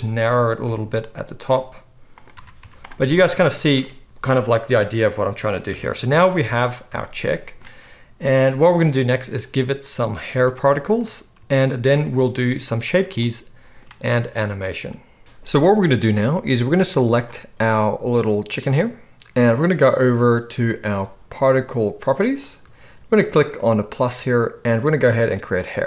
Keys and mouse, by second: 2.3 Tab, 2.6 z, 5.7 KP_1, 6.4 alt+a, 17.0 click, 17.5-22.4 middle drag, 22.4 click, 22.5-23.5 middle drag, 23.5-25.4 drag, 25.4-25.8 middle drag.